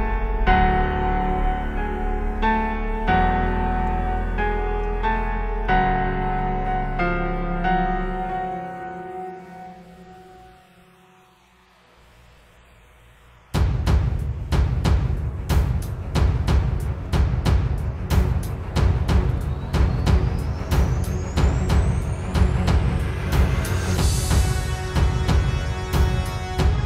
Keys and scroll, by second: 3.9 space, 4.4 super+space, 5.0 super+space, 8.5 space, 17.0 space, 17.7 alt+super+space, 18.2 super+space, 19.7 space, 20.5 super+space.